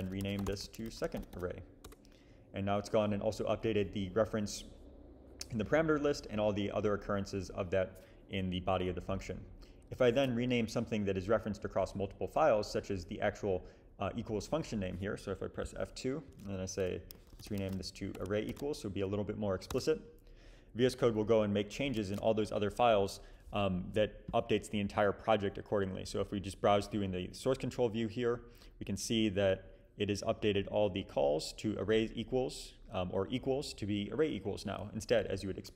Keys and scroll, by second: 0.0-1.8 typing, 1.8 Return, 10.3 super+s, 15.6 F2, 16.3 Left, 16.9-18.5 typing, 19.7 Return, 22.0 alt+super+s.